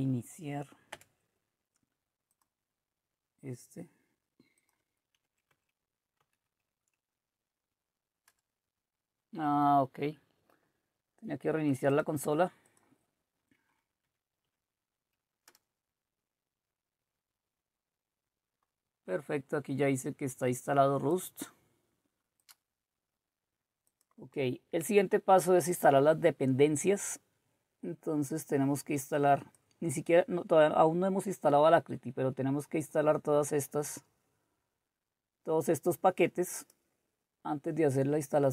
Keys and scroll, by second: 5.2 Up, 5.5 Up, 6.2 Up, 8.3 Return, 14.0 Up, 14.4 Up, 15.5 Return.